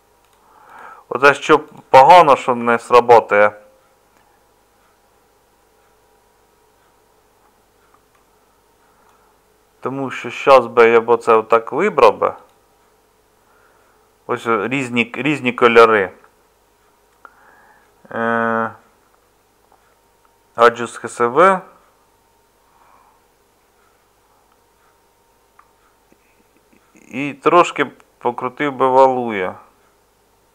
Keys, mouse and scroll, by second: 2.0 middle click, 3.2 middle click, 10.3 Tab.